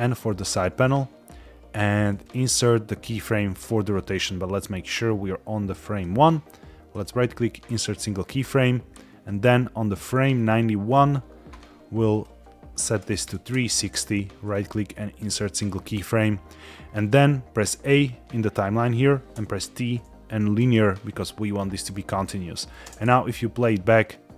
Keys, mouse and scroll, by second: 0.6 click, 2.0-3.9 right drag, 4.5 drag, 6.8-7.7 right drag, 9.1 click, 12.0-13.4 drag, 14.3-15.2 right drag, 17.6 a, 19.3 t, 21.8 scroll down 1, 22.1-22.7 middle drag, 22.8 space, 24.0-24.3 middle drag.